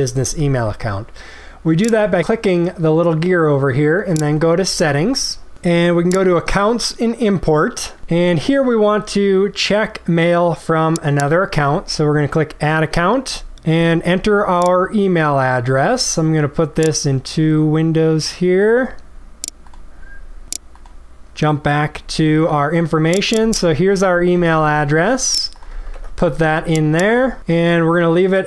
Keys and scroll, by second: 24.3 ctrl+c, 25.9 ctrl+v.